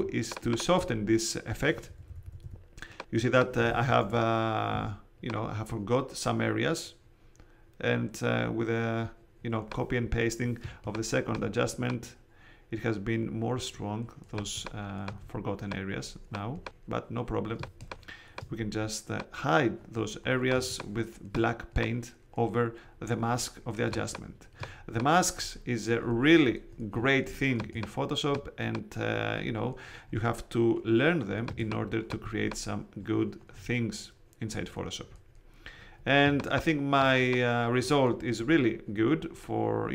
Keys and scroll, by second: 0.7 super+space, 1.8 ], 4.0 super+z, 4.7 super+x, 10.6 space, 14.3 space, 17.5 space, 20.5 space, 23.8 space, 27.5 space, 31.4 space, 36.2 space.